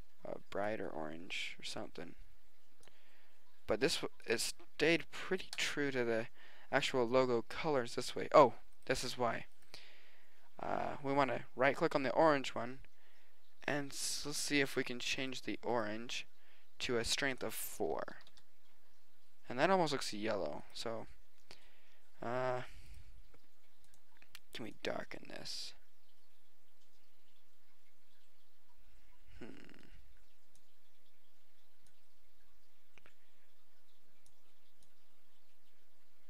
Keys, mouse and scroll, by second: 8.8 right click, 10.1-11.5 drag, 17.3-18.9 drag, 20.6-22.1 drag, 22.5 middle click, 25.9 middle click, 26.8-28.1 middle drag.